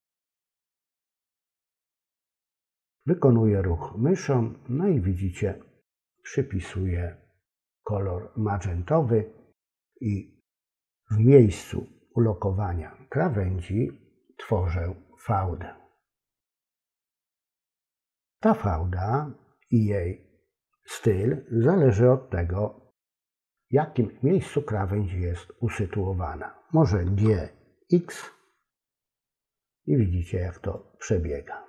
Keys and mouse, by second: 27.1 g.